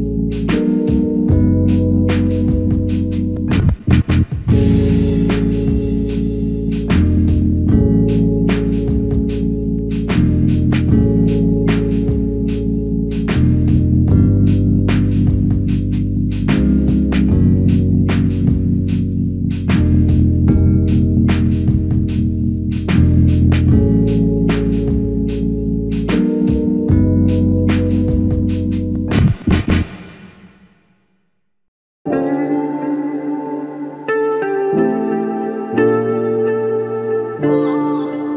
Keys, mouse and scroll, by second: 37.2 double click.